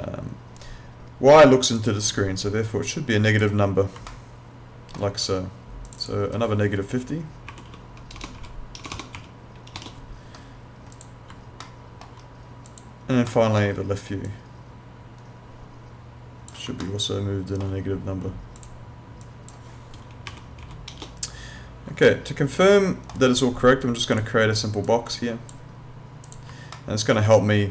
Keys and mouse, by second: 1.8 click, 4.1 alt+middle click, 5.9 click, 7.5-9.2 typing, 10.9 click, 11.6 alt+middle click, 12.7 click, 13.3 alt+middle click, 14.3 click, 16.8 alt+middle click, 18.6 click, 20.3-21.2 typing, 22.1 alt+middle click, 24.1 click, 26.8 alt+middle click.